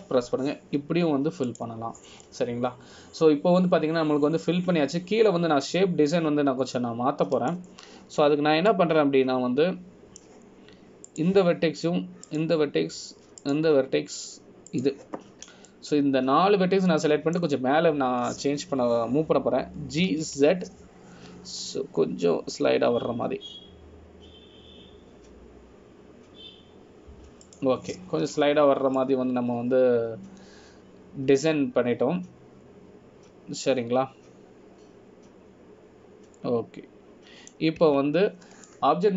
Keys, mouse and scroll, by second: 3.6 click, 4.4 scroll down 1, 4.6 middle click, 10.4 scroll up 2, 10.8 middle click, 13.2 click, 14.4 shift+click, 16.9 shift+click, 17.8 middle click, 30.5 scroll down 2, 31.1 middle click, 31.1 scroll down 1.